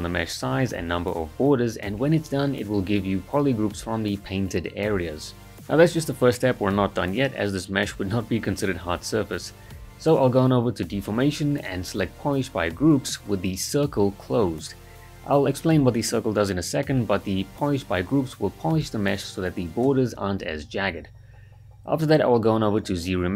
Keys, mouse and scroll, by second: 0.7 ctrl+shift+click, 0.8 ctrl+z, 0.9 right click, 0.9-1.3 ctrl+shift+click, 1.3 ctrl+w, 1.4 ctrl+shift+click, 1.5 alt+right click, 1.7 ctrl+shift+click, 1.8 right click, 2.0-2.3 ctrl+shift+click, 2.3 ctrl+w, 2.6 ctrl+shift+click, 2.7 ctrl+right click, 2.9 ctrl+shift+click, 3.0 ctrl+right click, 3.3 right click, 3.6-4.2 ctrl+shift+click, 4.3 ctrl+w, 4.3 ctrl+shift+click, 4.4 right click, 4.5 ctrl+right click, 4.6 alt+right click, 4.8 ctrl+shift+click, 5.1 right click, 5.5-6.1 ctrl+alt+right click, 6.2-6.8 ctrl+shift+click, 6.9 ctrl+w, 6.9 ctrl+shift+click, 7.0 alt+right click, 7.1 click, 7.1-7.6 ctrl+shift+drag, 9.5-10.2 drag, 12.6-13.2 drag, 14.2-15.2 right click, 15.8 ctrl+z, 17.8-18.4 drag, 19.3 ctrl+right click, 19.6-20.3 drag, 22.4-23.3 shift+drag.